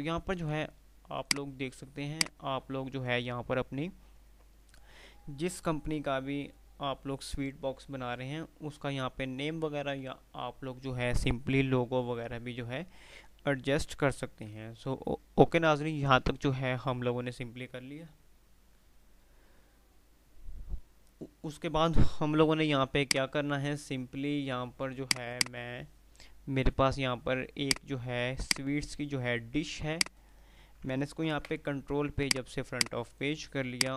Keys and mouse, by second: 1.4 F2, 5.6 typing, 14.6 F3, 22.7 F2, 23.3 F2, 23.3 click, 24.8 click, 25.8 F3, 27.8 click, 29.6 F2, 30.1 click, 30.3 F2, 31.6 shift+Page_Up, 32.4-33.7 drag.